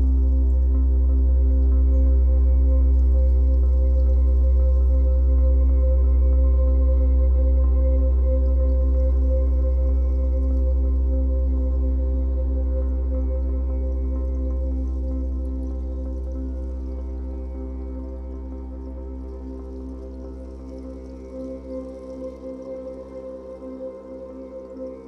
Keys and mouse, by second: 0.3-1.4 drag, 2.0-3.3 drag, 4.2 click, 5.1-6.7 drag, 7.4 click, 8.2-9.9 drag, 10.6 click, 11.0 ctrl+alt+click, 11.6 alt+shift+click, 16.6-19.9 drag, 20.7-21.7 ctrl+alt+drag, 22.0 alt+shift+click.